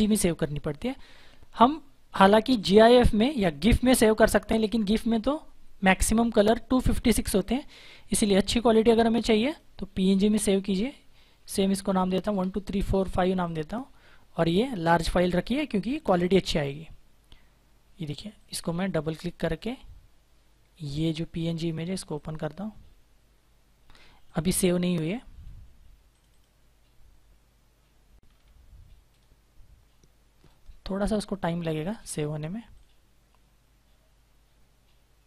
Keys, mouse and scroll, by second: 3.5 click, 7.0 click, 10.9-12.2 typing, 13.3 click, 16.0 click, 18.1 click, 20.9 click, 25.1-26.0 scroll down 1, 26.0 right click, 29.8 click.